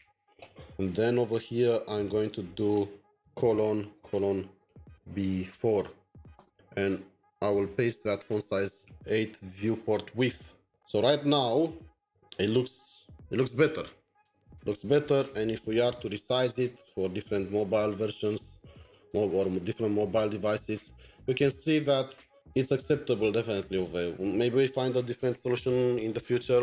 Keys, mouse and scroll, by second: 2.8-5.4 typing, 5.6 Return, 6.3 End, 7.6 typing, 10.3 alt+Tab, 10.9 scroll down 5, 11.4-11.8 scroll up 6, 11.8-12.7 scroll down 19.